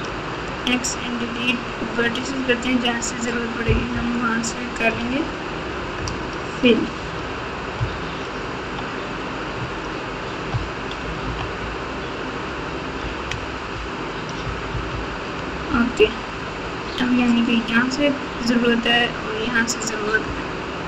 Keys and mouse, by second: 0.3 x, 3.9 KP_4, 5.0 alt+z, 5.9 KP_Add, 6.5 KP_Add, 6.9 KP_Add, 7.3 KP_Add, 7.7-8.7 KP_Subtract, 9.5 KP_Subtract, 10.5 KP_4, 10.7 KP_4, 11.0 KP_4, 11.2 KP_4, 12.0-12.7 ctrl+KP_4, 13.7 ctrl+KP_4, 14.2 ctrl+KP_4, 14.7 KP_4, 14.8 KP_4.